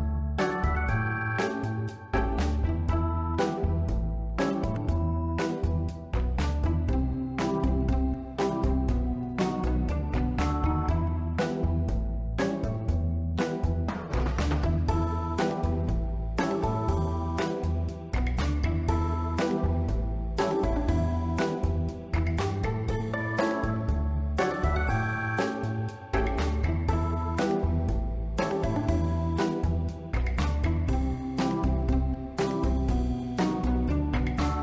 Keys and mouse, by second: 1.9-4.2 drag, 4.7-5.5 middle drag, 6.0-7.2 drag, 7.7-8.2 drag, 8.4-8.8 middle drag, 8.9 ctrl+middle drag, 9.7 x, 10.1 click, 10.3-10.8 middle drag, 11.2 middle click, 11.9 s, 12.3 y, 13.3 click, 13.6-14.1 middle drag, 14.3 shift+middle drag, 14.6 ctrl+middle drag, 15.1 Tab, 15.6 middle click, 16.7 ctrl+r, 17.6 Escape, 18.0 middle click, 19.1 ctrl+b, 20.6 click, 23.9 click, 26.0 click, 31.9 click, 33.0-33.5 middle drag.